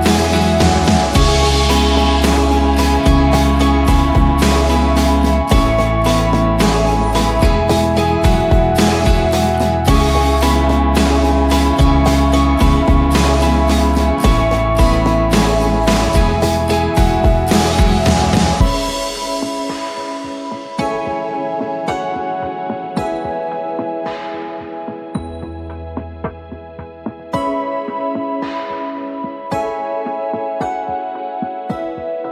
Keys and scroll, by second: 0.9 Return, 2.1-6.8 typing, 7.9 ctrl+t, 10.0 Return, 10.3 ctrl+a, 11.6 ctrl+d, 13.9-19.5 typing, 20.6-22.5 typing, 25.2 Return.